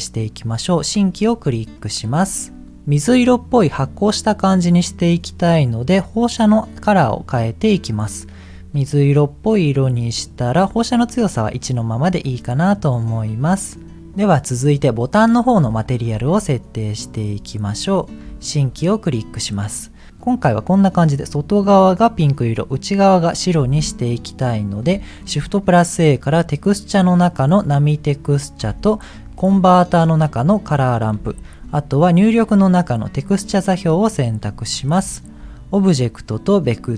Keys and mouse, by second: 1.8 middle click, 6.3 click, 12.2 click, 14.8 click, 15.6 t, 15.8 middle click, 17.1 click, 18.2 t, 18.3 middle click, 18.9 click, 23.7 click, 24.9 t, 28.6 t, 34.9 middle click, 36.0-36.9 drag.